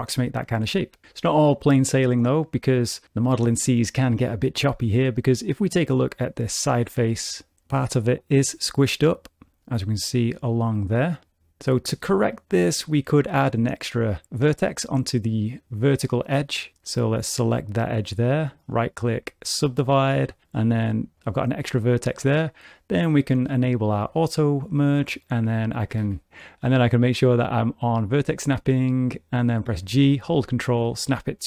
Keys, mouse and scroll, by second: 6.2 click, 6.9 g, 8.8 click, 16.8 2, 17.2 click, 18.5 right click, 20.3 1, 20.6 click, 23.5 click, 25.9 g, 26.9 click, 29.7 g.